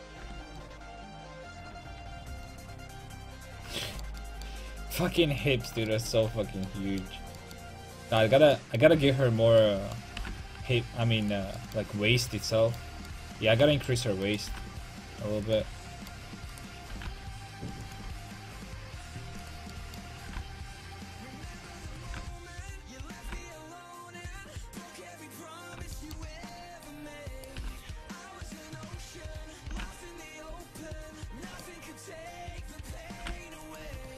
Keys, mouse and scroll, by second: 0.3 Tab, 6.4 Tab, 8.2 right click, 10.3 g, 14.3-15.6 right drag, 14.5 g, 15.6 click, 15.7 a, 15.9 click, 15.9 right click, 17.0 g, 18.1 a, 20.0-21.4 right drag, 21.4 a, 21.8-23.5 right drag, 22.1 g, 23.3 g, 24.2 a, 27.4-30.3 right drag, 27.6 g, 28.4-30.3 drag, 29.8 g, 30.6 a, 32.9-33.9 right drag, 33.3 g, 33.9 a.